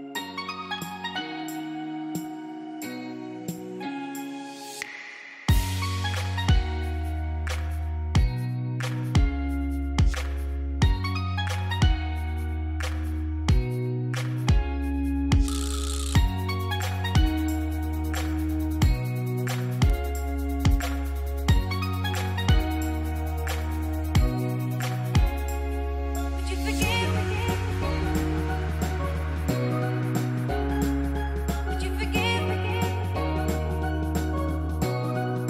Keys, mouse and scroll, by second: 0.5 click, 2.2 z, 2.6 click, 3.1 space, 3.3 click, 3.6 space, 5.0 click, 9.0 space, 9.1 click, 9.5 space, 10.1 click, 10.5 space, 10.6 click, 11.0 space, 12.0 click, 23.2 click, 28.1 click, 32.2 click.